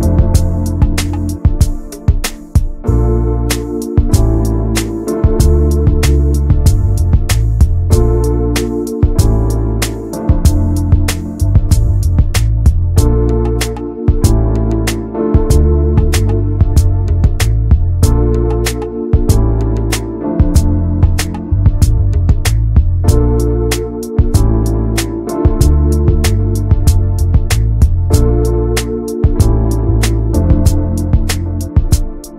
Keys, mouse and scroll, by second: 0.2 middle click, 0.4 scroll up 2, 0.6-2.1 shift+middle drag, 2.1 3, 2.2 click, 2.9 shift+click, 3.1 scroll down 2, 3.3 middle click, 3.7-4.8 scroll up 5, 4.0 middle click, 4.4 shift+middle click, 4.8 middle click, 5.2-6.5 shift+drag, 6.5-7.5 middle drag, 7.5 x, 7.8 middle click, 8.4 click, 8.8 middle click, 9.4 1, 9.6 click, 10.5 2, 10.6 click, 11.6-12.8 middle drag, 13.0 alt+shift+click, 14.5 alt+shift+click, 15.4-16.9 middle drag, 16.9 alt+shift+click, 17.1 middle click, 17.9 alt+shift+click, 18.1 scroll down 1, 18.2 middle click, 19.1 scroll down 1, 19.2 shift+middle click, 19.5 scroll up 1, 19.7-21.2 middle drag, 21.2 click, 21.6-22.8 middle drag, 22.8-23.1 scroll up 1, 23.1 middle click, 24.0-24.3 scroll up 1, 24.3 shift+middle click, 24.8-26.0 middle drag, 26.0 ctrl+b, 27.8 Tab, 28.1 middle click, 28.4 click, 28.6-29.7 middle drag, 29.8 Tab, 30.1 Tab, 30.2 click, 30.8 ctrl+a, 31.0 middle click, 31.2 Tab, 31.3-31.9 scroll up 4, 31.6 shift+middle click, 31.9 middle click, 32.2 scroll down 1.